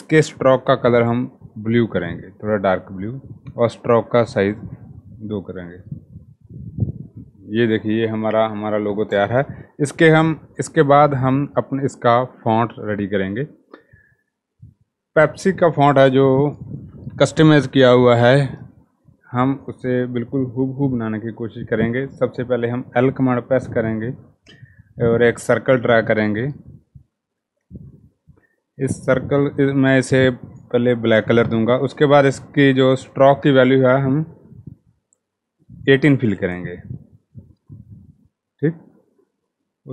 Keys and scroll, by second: 21.7 l, 35.6-36.0 typing, 36.1 Return.